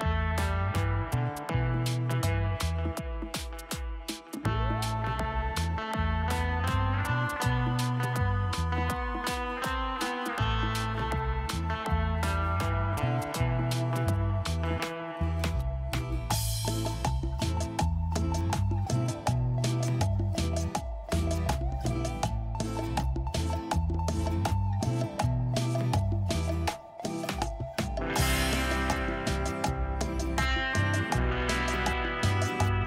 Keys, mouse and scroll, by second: 0.0-0.1 typing, 2.8-3.8 typing, 9.0 typing, 10.9-11.6 typing, 11.2 double click.